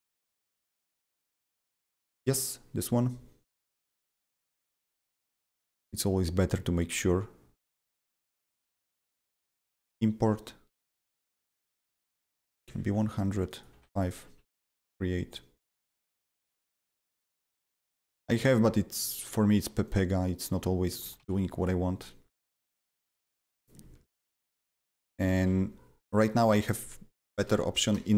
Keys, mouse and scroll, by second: 1.9 click, 4.9 click, 4.9 click, 5.9 click, 8.9 click, 9.6 click, 11.6 click, 12.6 KP_1, 12.6 KP_0, 13.2 click, 13.4 double click, 13.7 5, 13.9 click, 14.7 click, 15.5 click, 17.8 click, 19.8-23.0 drag, 21.0 ctrl+c, 21.2 ctrl+c, 23.0 click, 23.6-25.3 drag, 25.2 ctrl+c, 25.4 ctrl+c, 27.4 Return, 27.9 BackSpace.